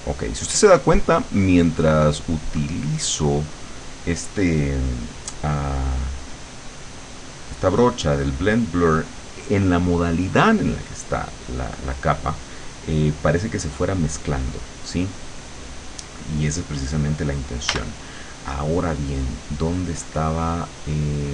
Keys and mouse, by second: 1.6-3.7 drag, 17.7 b.